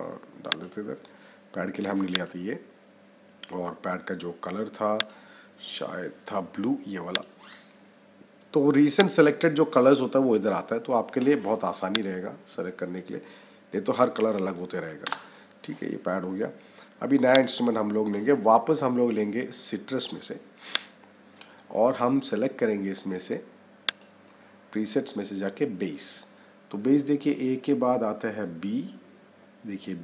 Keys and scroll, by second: 14.9 Return.